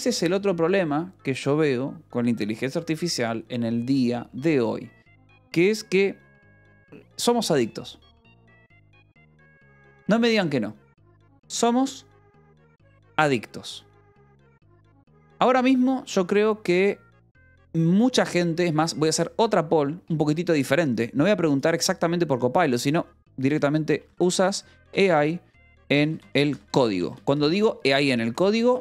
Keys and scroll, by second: 23.9-28.8 typing, 27.8 Tab.